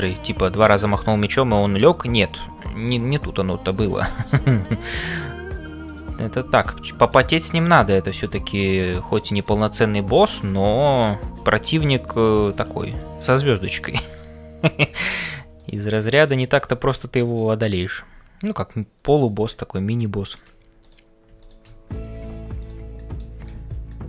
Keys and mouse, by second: 0.0-24.0 typing, 3.5 middle click, 5.9 click, 6.9 middle click, 7.6 click, 8.6 middle click, 10.9 click, 11.4 middle click, 13.2 middle click, 14.1 click, 15.9 middle click, 17.2 click, 19.6 middle click, 21.4 shift+click, 22.6 click, 23.0 middle click, 23.9 middle click.